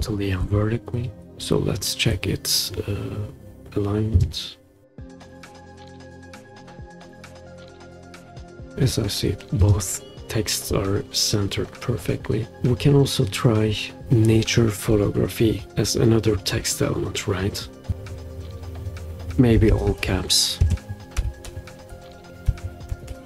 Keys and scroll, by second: 19.3-23.1 typing.